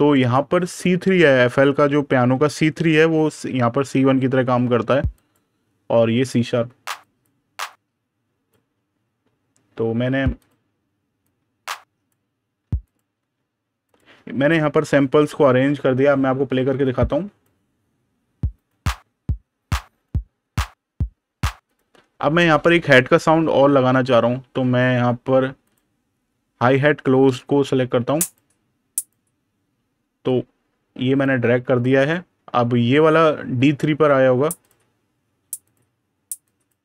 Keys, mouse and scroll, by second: 5.0 click, 10.2 click, 13.7 click, 18.4 click, 23.3 super+KP_Add, 25.5 click, 26.6 super+KP_Subtract, 28.1 click, 34.5 click.